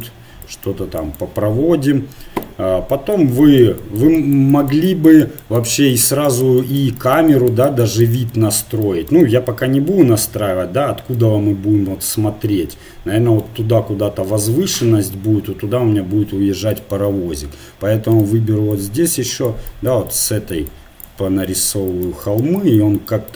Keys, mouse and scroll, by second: 0.9 click, 2.5 click, 3.0 middle click, 3.6-4.6 drag, 8.1-10.0 middle drag, 10.2-14.7 middle drag, 16.7-18.5 drag, 18.8-23.3 drag.